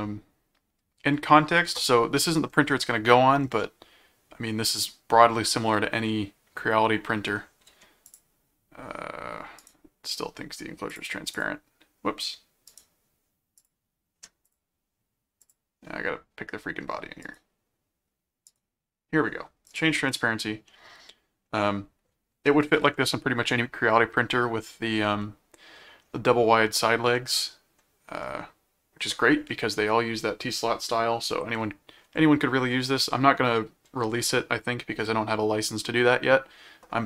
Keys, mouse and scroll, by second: 3.6-7.3 middle drag, 8.0 click, 9.6 right click, 10.9 click, 12.7 right click, 13.6 click, 14.5 click, 15.4 click, 17.2 right click, 18.4 right click, 19.7 click, 20.7 middle click, 25.2 middle click, 27.2 middle click.